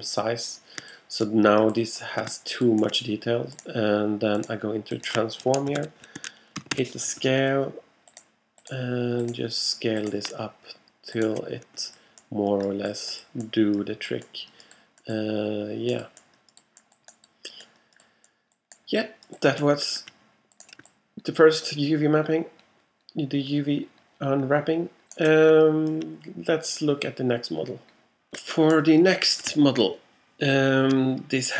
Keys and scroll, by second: 5.8 5, 6.2 Tab, 6.8 5.